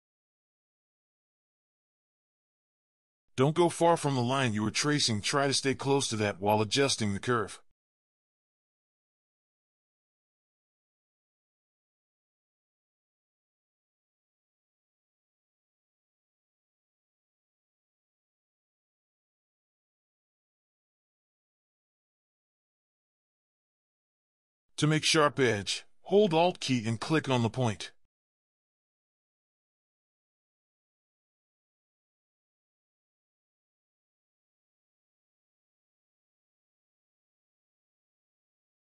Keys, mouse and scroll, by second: 28.9 alt+click, 35.2 alt+click.